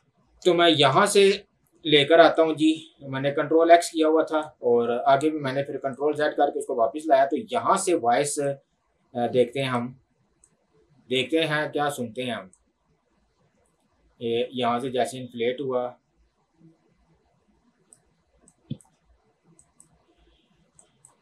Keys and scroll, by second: 0.9 Delete.